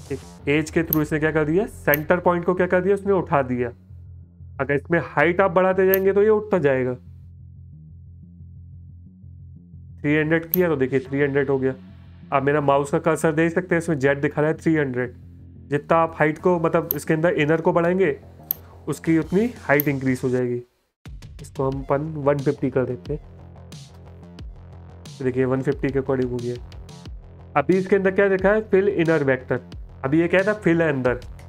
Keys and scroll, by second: 8.4 BackSpace, 15.9 space, 20.9 BackSpace, 21.6 KP_5, 22.3 BackSpace, 23.4 KP_1, 23.9 KP_5.